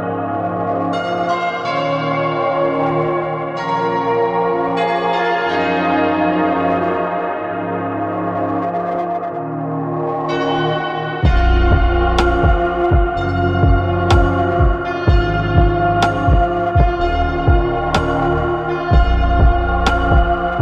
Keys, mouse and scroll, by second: 0.1 scroll up 2, 0.6-1.3 middle drag, 1.3-3.9 scroll up 2, 3.9-7.1 drag, 9.8-10.9 scroll down 2, 12.2-20.6 drag.